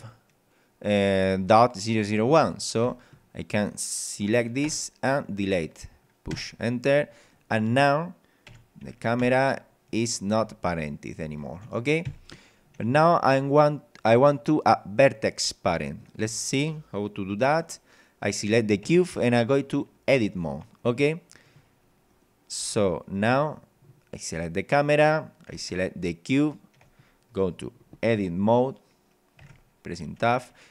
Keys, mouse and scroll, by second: 2.8 click, 4.7 BackSpace, 6.3 Return, 7.2 click, 8.5 p, 9.2 w, 10.4 d, 12.1 Escape, 13.3 scroll up 2, 13.7 scroll down 2, 15.1 scroll up 2, 15.5 scroll down 2, 16.0 right click, 16.6 scroll up 2, 18.9 Tab, 20.7 right click, 22.1 right click, 22.8 Tab, 24.1 right click, 26.3 shift+right click, 29.4 Tab, 30.1 scroll up 2, 30.5 scroll down 2.